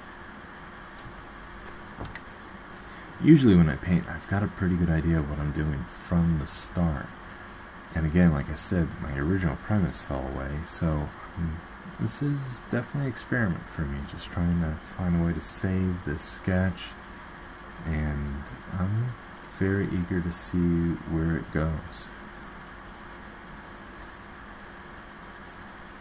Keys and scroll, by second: 8.9 ctrl+z.